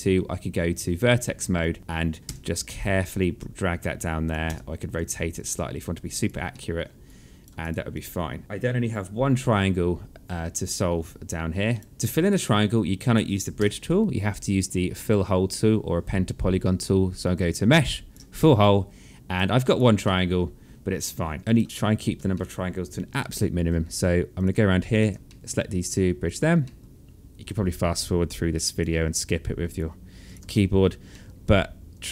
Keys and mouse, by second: 1.1 click, 2.1 w, 2.7 click, 4.0 e, 4.9 click, 6.0 alt+middle click, 6.6 right click, 7.2 click, 10.8 right click, 11.8 click, 13.1 w, 16.9 click, 18.2 right click, 19.2 click, 19.6 alt+middle click, 21.0 click, 21.4 right click, 21.6 click, 21.9 alt+middle click, 23.9 click, 24.5 shift+click, 24.8 alt+middle click, 25.8 click, 26.2 alt+middle click, 28.3 click, 29.8 shift+click, 30.1 alt+middle click.